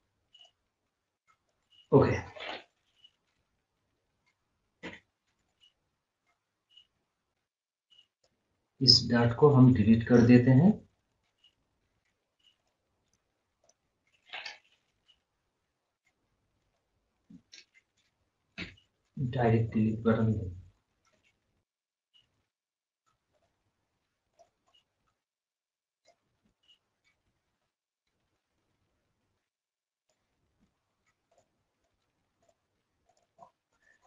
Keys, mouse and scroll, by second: 0.3 right click, 0.8 click, 1.6 scroll up 1, 1.8 scroll down 1, 5.2 scroll down 1, 7.3 click, 8.8 scroll up 1, 9.5 scroll down 1, 11.1 scroll up 1, 11.5-11.8 scroll down 1, 11.8 scroll up 1, 12.0 click, 13.0 right click, 13.6 click, 16.6 click, 16.7 click, 19.3 scroll up 1, 19.8 scroll down 1, 21.1 d, 21.5 scroll up 1, 21.7 scroll, 21.9 scroll down 1, 23.3 click, 24.6 scroll down 1, 25.9 click, 27.9 scroll up 1, 28.7 scroll down 1, 30.0 click, 31.7 right click, 31.8 right click, 32.4 click, 33.4 scroll down 1, 33.8 scroll up 1.